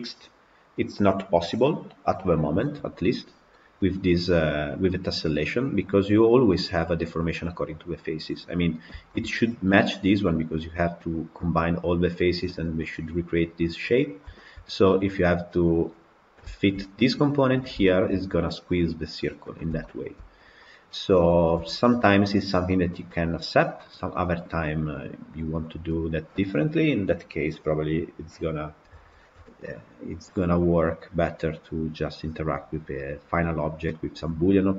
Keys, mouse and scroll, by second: 3.4-8.1 middle drag, 8.1-8.7 scroll down 7, 9.0-13.9 shift+middle drag, 13.9-14.3 scroll up 2, 14.3-15.6 shift+middle drag, 15.6 scroll down 1, 16.4-17.4 shift+middle drag, 17.4-17.7 scroll up 2, 17.7-20.6 shift+middle drag, 20.6 click, 21.4 KP_Decimal, 22.2-22.6 scroll up 1, 22.6-34.7 middle drag.